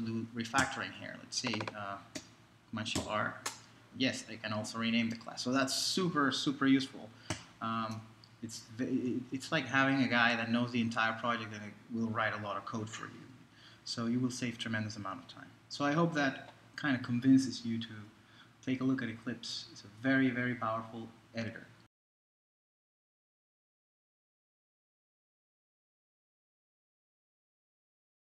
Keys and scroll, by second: 0.6 alt+super+r, 3.0 alt+super+r.